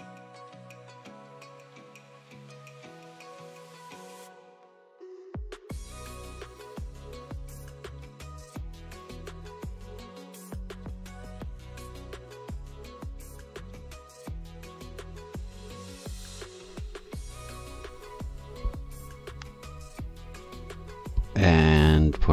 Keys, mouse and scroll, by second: 0.0-0.2 typing, 0.4 scroll up 3, 1.1 shift+click, 1.4 click, 1.4-3.2 typing, 1.5 click, 2.3 click, 2.5 click, 3.3 click, 3.5 click, 3.7 click, 3.9 right click, 5.5 click, 5.7 click, 5.9 click, 6.0 s, 6.6 click, 6.8 click, 7.0 click, 7.5 s, 7.8 click, 8.1 click, 8.6 click, 9.0 click, 9.6 click, 9.8 click, 10.0 e, 10.3 click, 10.8 click, 11.6 click, 12.0 click, 12.7 click, 12.7-16.7 typing, 13.9 click, 14.7 click, 15.5 click, 15.6 shift+click, 16.5-19.0 drag, 21.2 click.